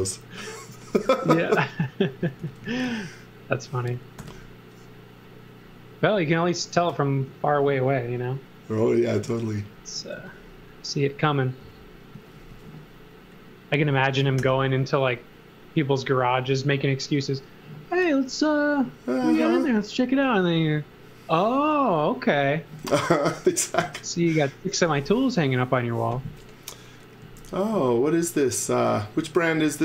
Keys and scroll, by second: 0.7 z, 2.4 x, 2.9 z, 4.2 l, 7.3 a, 10.2 x, 11.6 x, 12.2 z, 12.5 x, 14.4 i, 22.8 e, 27.8 space.